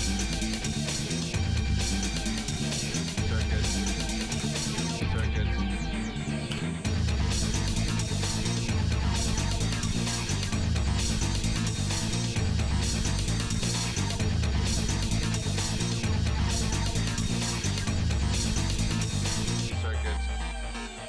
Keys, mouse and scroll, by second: 1.0-1.6 scroll down 3, 1.5-1.8 scroll up 2, 2.3 shift+middle click, 4.3 KP_4, 5.1 KP_1, 6.5 KP_7, 9.8 KP_Enter, 12.5 g, 14.1 shift+middle click, 15.0 middle click, 15.6 scroll up 1, 16.2 scroll up 2, 17.1-18.3 drag, 18.9-21.0 drag.